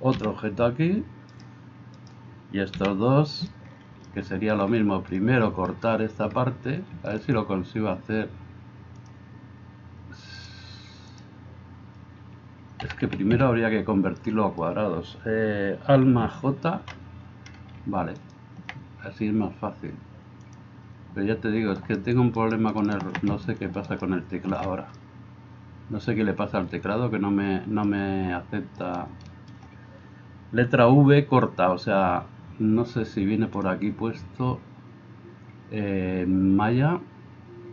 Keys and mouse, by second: 0.2 g, 2.0-3.3 middle drag, 2.0-3.3 right drag, 9.0-10.4 middle drag, 10.4-37.7 drag, 12.9 a, 16.7 alt+j, 18.2 middle click, 18.2 right click, 21.7 right click, 22.4 shift+right click, 22.8 shift+right click, 23.9 alt+shift+right click.